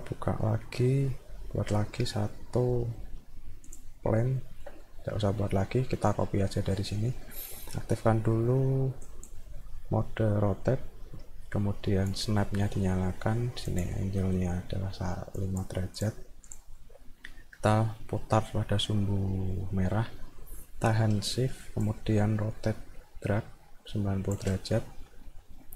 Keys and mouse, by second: 0.3 middle click, 3.7 click, 4.4 alt+middle click, 5.6 middle click, 9.1 click, 12.1 right click, 13.7 click, 15.4 click, 16.5 click, 16.9 middle click, 21.8-24.4 shift+drag.